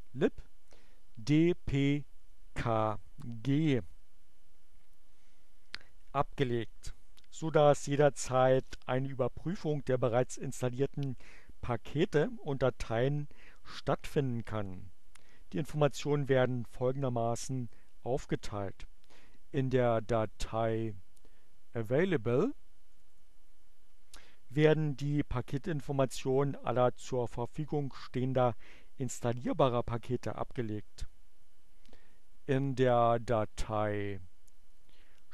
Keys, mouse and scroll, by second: 22.7 click, 33.3 click, 34.7 click.